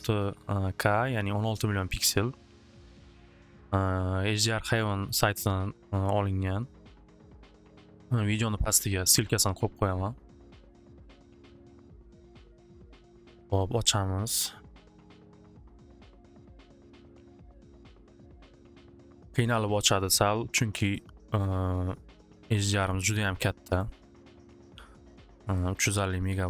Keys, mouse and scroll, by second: 5.3 click, 8.5-9.7 drag, 9.7 right click, 23.8 click, 24.2 scroll, 25.8 click, 26.0 click.